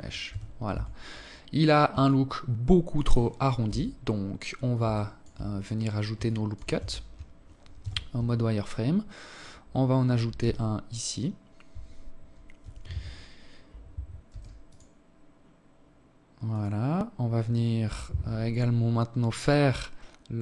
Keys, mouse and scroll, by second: 0.0-0.4 scroll down 4, 0.9 alt+click, 2.5 KP_7, 3.7 alt+shift+click, 4.3 scroll up 3, 5.1 alt+shift+click, 5.6 Tab, 6.6 z, 9.2 z, 11.4 z, 13.1 ctrl+r, 17.4-19.0 scroll up 1.